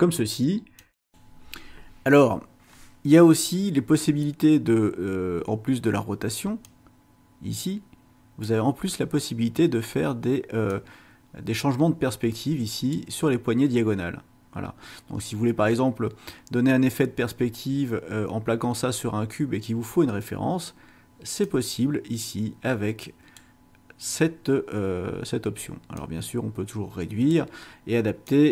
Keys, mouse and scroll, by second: 0.8 click, 6.6-8.6 drag, 10.7-13.1 drag, 21.4-23.6 drag, 26.0-27.5 drag, 28.2-28.5 drag.